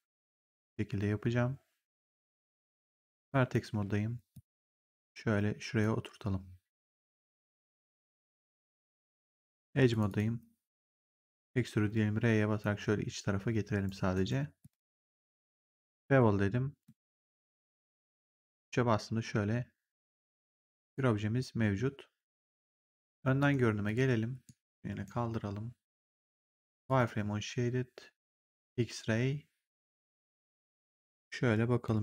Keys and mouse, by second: 2.7 right click, 3.2 click, 3.6 w, 4.2 click, 7.0 click, 9.0 right click, 9.8 click, 11.3 click, 11.6 r, 12.5 click, 14.0 right click, 14.5 click, 16.7 click, 17.5 3, 17.9 right click, 18.5 click, 20.7 click, 23.3 right click, 23.7 click, 24.4 right click, 26.7 click.